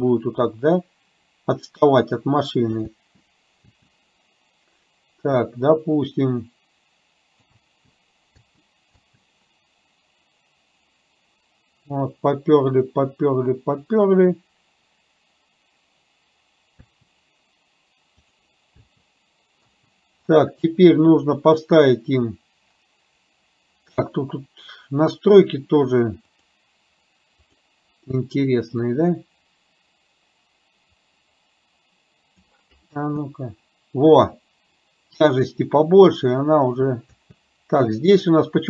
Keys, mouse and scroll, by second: 0.2-2.7 drag, 2.8 space, 3.8 space, 5.8-7.5 drag, 7.7 space, 8.5 space, 9.1 space, 16.8 space, 18.2 click, 19.0 space, 19.7 space, 26.3 click, 27.5 click, 28.8-32.5 drag, 33.0 space, 37.2 space.